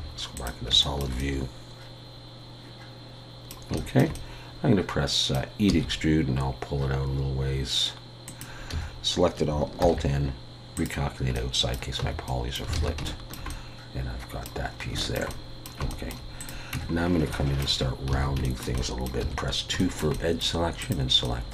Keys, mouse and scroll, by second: 0.8 shift+middle click, 1.2 middle click, 3.7 shift+middle click, 4.1 middle click, 5.7 e, 9.8 alt+n, 11.4 middle click, 12.0 Tab, 12.3 middle click, 12.7 alt+a, 13.1 shift+middle click, 13.5 middle click, 14.7 scroll up 3, 15.0 shift+middle click, 15.3 middle click, 15.9 shift+middle click, 16.4 click, 16.7 Tab, 16.9-17.3 scroll up 2, 17.3 shift+middle click, 17.8 scroll up 2, 18.1 alt+a, 18.4 shift+middle click, 18.8 middle click, 19.2 2, 19.8 shift+middle click, 20.1 middle click, 20.8 click, 21.2 middle click.